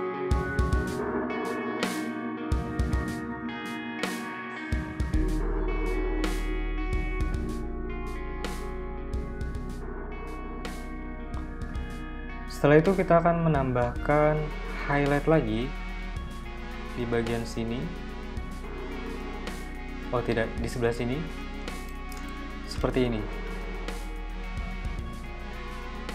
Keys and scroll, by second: 0.7 super+c, 0.9 super+v, 2.2 BackSpace, 3.3-4.4 typing, 4.4 super+v, 5.8 shift+super+}, 5.9 super+[, 6.0 super+[, 6.3 super+[, 6.7 a, 8.2 v, 8.6 BackSpace, 20.9 z, 21.4 v, 22.8 p.